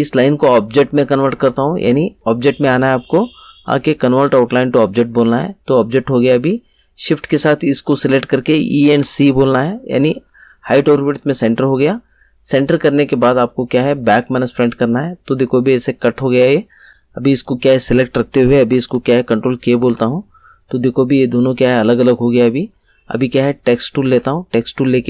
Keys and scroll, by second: 8.8 e, 9.2 c, 19.4 ctrl+k.